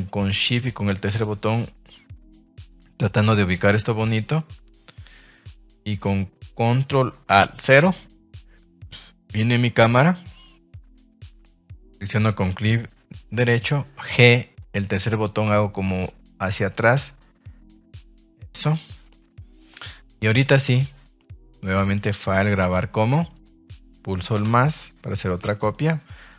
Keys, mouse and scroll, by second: 0.3-1.1 shift+middle drag, 1.3-2.6 middle drag, 2.9 middle click, 3.7-5.1 middle drag, 7.7 ctrl+alt+KP_0, 11.9 right click, 14.1 g, 14.5 middle click, 18.2 click, 19.7 shift+middle click, 20.4 a, 20.6 a, 21.8-23.1 drag.